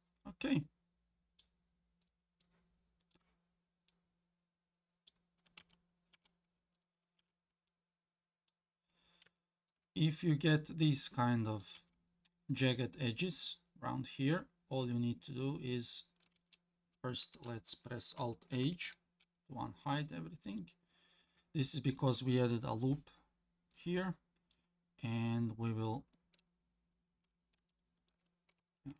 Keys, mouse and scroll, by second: 0.1 scroll down 2, 0.5-1.4 middle drag, 2.0 click, 2.4-3.1 middle drag, 3.4 scroll down 1, 3.9-5.1 middle drag, 5.6 Tab, 6.1 Tab, 6.7 click, 7.2 Tab, 7.7 middle click, 8.8-9.2 scroll up 3, 9.4 shift+middle click, 10.0 scroll up 1, 11.2 middle click, 11.8 Tab, 12.4 scroll down 1, 14.2 Tab, 16.4 Tab, 18.6 alt+h, 20.0 middle click, 20.9-21.4 scroll up 2, 21.4 middle click, 23.1 scroll down 2, 23.7 middle click, 25.3-26.2 scroll up 1, 27.1 scroll down 1, 27.7 shift+middle click, 28.8 ctrl+r.